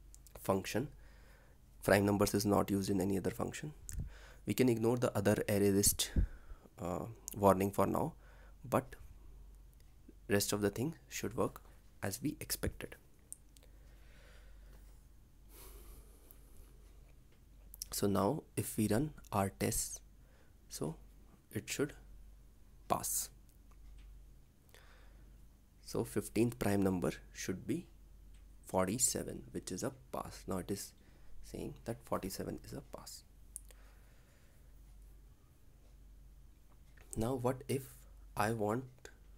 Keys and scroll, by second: 18.5 ctrl+s, 35.6 ctrl+c, 38.6 ctrl+v.